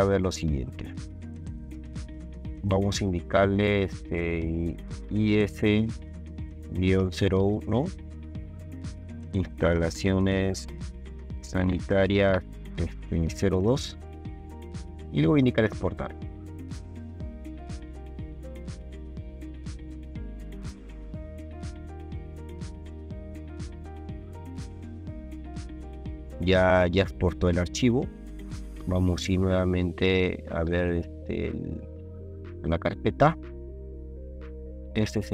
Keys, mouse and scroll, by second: 1.8 click, 5.1 i, 5.4 s, 6.6 KP_Subtract, 7.0 KP_0, 7.2 KP_1, 9.1-13.5 typing, 17.3 click, 32.7 ctrl+alt+click, 34.5 ctrl+click.